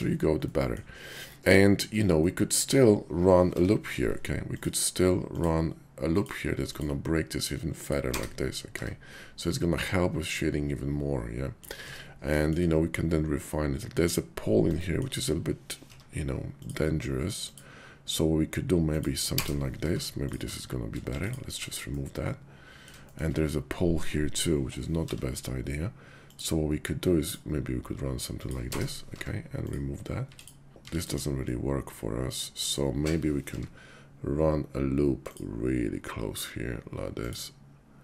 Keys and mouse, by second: 0.5 click, 1.1 click, 2.2 middle click, 3.5 k, 8.7 Tab, 9.4-11.6 drag, 11.8 Tab, 12.4 shift+click, 14.8 shift+click, 15.8 k, 19.8 Tab, 21.0 x, 21.8-22.9 drag, 23.1 shift+click, 24.9 k, 29.1 Tab, 29.5 click, 30.2 x, 30.7 x, 31.2 x, 31.5-32.7 drag, 33.5 k.